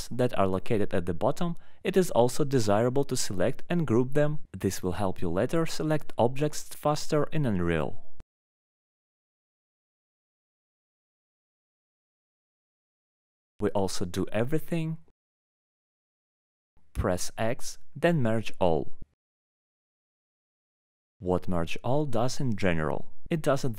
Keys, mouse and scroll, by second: 0.0 scroll up 2, 0.1 scroll down 1, 0.2 middle click, 0.3 middle click, 0.4 middle click, 0.8 middle click, 1.0 scroll down 4, 1.1 scroll, 2.1 click, 2.5 scroll, 2.8 scroll up 9, 3.1 alt+middle click, 3.2 scroll down 1, 4.4 scroll, 4.8 scroll down 1, 5.2 alt+middle click, 5.3 scroll, 6.3 alt+middle click, 6.9 scroll, 7.6 ctrl+click, 8.5 alt+middle click, 9.5 ctrl+click, 10.0 alt+middle click, 11.7 click, 12.7 click, 15.7 alt+middle click, 16.3 alt+middle click, 20.0 click, 20.6 middle click.